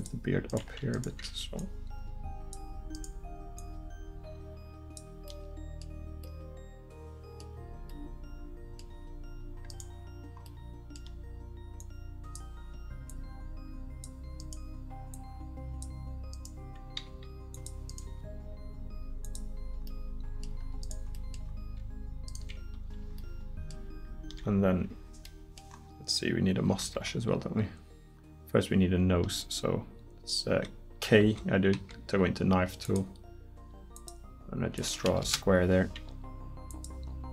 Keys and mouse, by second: 0.1 middle click, 0.5-2.0 right drag, 2.0 click, 5.5 middle click, 9.7 right click, 14.4-15.5 right drag, 17.1 g, 18.1 g, 23.4 middle click, 25.7 middle click, 26.8 k.